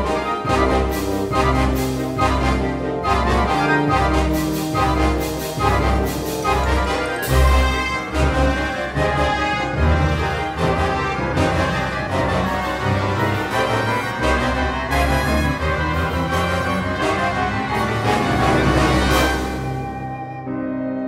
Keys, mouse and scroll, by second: 0.0 click, 0.3 shift+middle click, 0.4 ctrl+middle click, 0.7 shift+middle click, 1.1 ctrl+middle click, 1.8 shift+middle click, 3.8 g, 5.3 middle click, 6.5 g, 8.0 middle click, 8.3 g, 8.7 middle click.